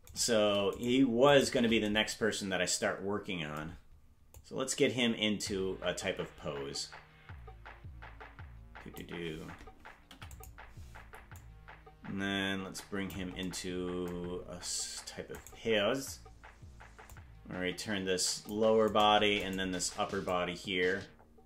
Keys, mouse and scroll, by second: 0.2 right click, 0.8 shift+right click, 1.4 right click, 1.6 ctrl+t, 3.6 ctrl+Tab, 4.4-9.0 drag, 10.0 i, 11.4-13.2 drag, 15.4 right click, 17.1-18.6 drag, 19.5 shift+right click, 20.3-21.4 drag.